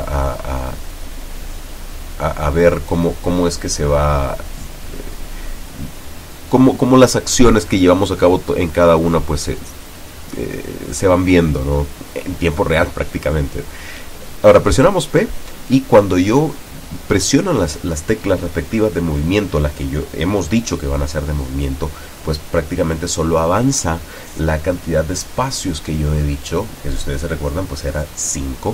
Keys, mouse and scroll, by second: 0.6 click, 2.0 click, 3.0-3.6 drag, 4.5 click, 5.8 scroll down 2, 6.5-6.9 scroll up 2, 7.1 scroll down 2, 9.1-10.2 drag, 13.3 scroll up 2, 15.5 p, 23.6 Up, 24.7 Down, 25.4 Up, 27.7 Right.